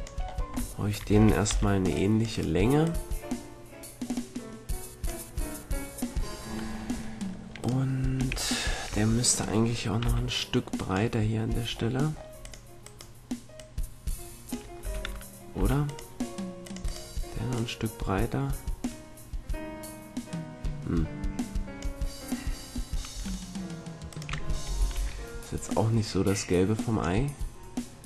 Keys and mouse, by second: 1.1 a, 1.4 c, 2.8-4.7 drag, 7.6-9.2 right drag, 8.1 a, 9.2 middle click, 10.0 c, 13.9-15.4 drag, 14.8 a, 15.5 c, 16.9-18.8 right drag, 17.5-19.3 drag, 19.3-22.8 middle drag, 23.1 a, 24.0 click, 24.9 ctrl+l, 24.9 right click, 25.6-26.7 drag, 27.2 click.